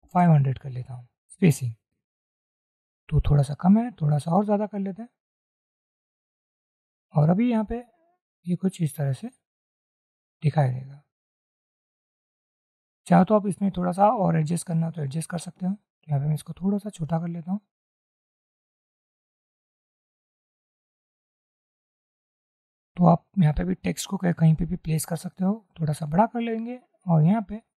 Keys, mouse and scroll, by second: 0.0 5, 0.2 0, 0.8 Return, 3.6 scroll up 1, 8.6 shift+click, 13.3 double click, 16.2 shift+click, 18.4 shift+click, 26.0 shift+click.